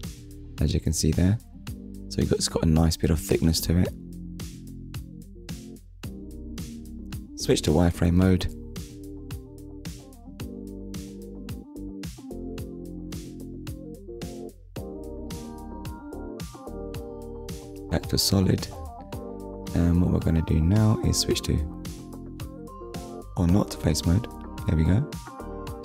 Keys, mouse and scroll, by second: 0.5 click, 1.1 middle click, 2.9 click, 3.5 middle click, 6.2 click, 6.6 middle click, 8.5 shift+click, 12.4 shift+middle click, 16.2 click, 17.3 click, 18.4 Tab, 22.5 click, 22.9 middle click, 24.1 click, 25.0 click, 25.7 middle click.